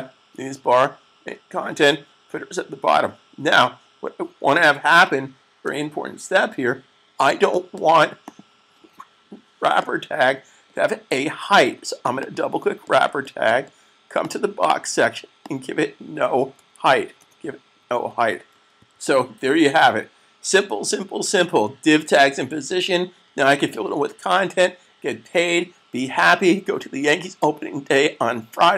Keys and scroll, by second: 18.6 s.